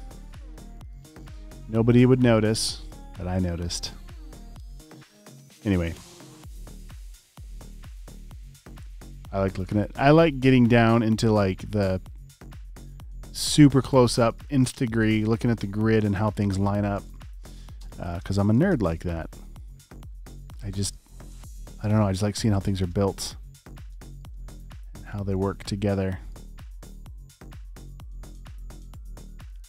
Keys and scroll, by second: 1.1 space, 1.4 space, 1.7 space, 3.2-5.5 typing, 8.6 space, 13.8 space, 15.5-18.5 typing, 19.1 alt+super+space, 20.3 space, 21.2 space, 22.0 space, 23.6 space, 26.5 typing, 28.8-29.6 typing.